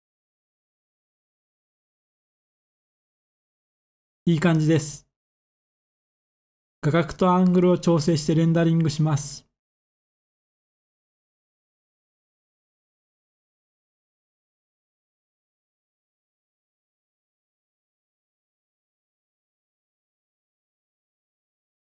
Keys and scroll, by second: 9.3 typing, 10.3 Tab, 10.6 typing, 11.3 Return, 19.5 n.